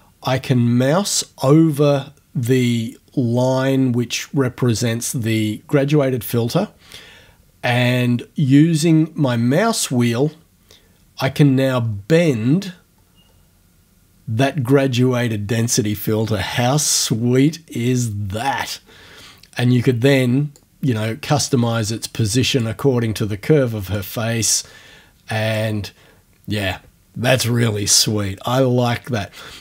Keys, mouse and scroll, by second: 9.0 scroll up 1, 9.6-10.8 scroll up 1, 11.1-12.1 scroll down 1, 12.3-13.1 scroll down 1, 20.6-22.8 drag, 23.9-29.6 drag.